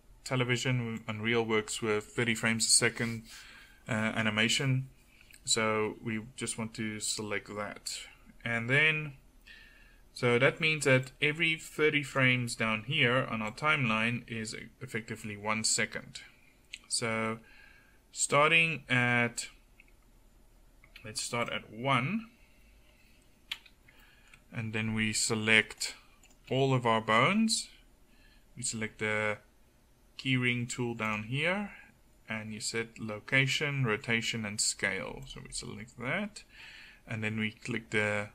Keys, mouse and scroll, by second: 0.5-11.1 middle drag, 15.4-21.5 middle drag, 22.9-24.1 middle drag, 25.8-26.3 right drag, 26.3-28.1 middle drag.